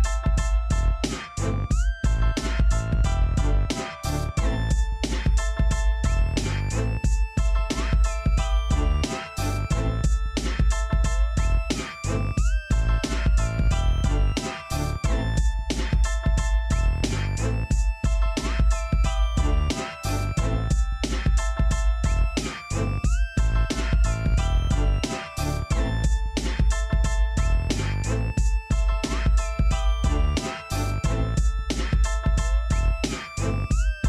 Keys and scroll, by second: 16.9-18.1 typing, 19.6 z, 21.5 p, 24.6 l, 26.3 ctrl+z, 32.0 Escape, 32.3-34.0 typing.